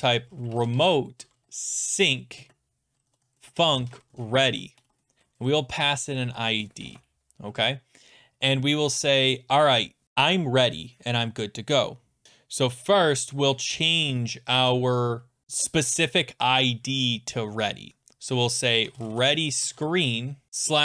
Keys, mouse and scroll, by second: 0.1-7.3 typing, 3.3 click, 14.5 typing, 18.6-20.5 typing.